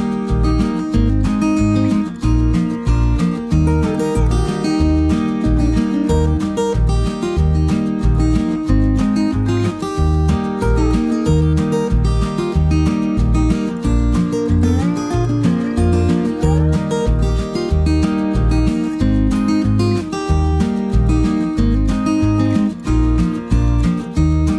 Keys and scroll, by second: 10.5 typing, 16.3 ctrl+-, 16.3 ctrl+-.